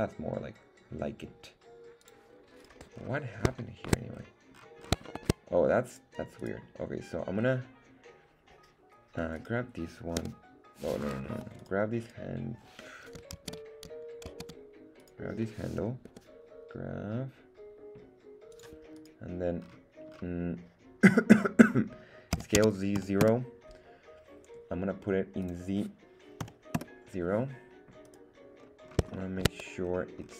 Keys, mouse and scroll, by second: 2.6 click, 2.6 right click, 2.9 scroll up 1, 3.6 shift+middle click, 4.1 scroll down 2, 4.5-4.9 scroll up 4, 5.1 shift+middle click, 5.9 right click, 6.4 right click, 7.4 scroll down 2, 9.3 right click, 10.2 g, 11.3 Escape, 11.6 click, 11.6 right click, 12.0 click, 12.0 right click, 13.7 super+z, 14.4 super+z, 15.0 click, 15.0 right click, 16.1 g, 18.5 click, 18.9 right click, 19.6-20.7 scroll up 4, 22.3 s, 22.6 z, 23.0 KP_0, 23.2 Return, 25.4-27.3 drag, 28.0 right click, 28.6-29.0 scroll up 2, 29.1 shift+middle click, 29.8-30.3 scroll down 2.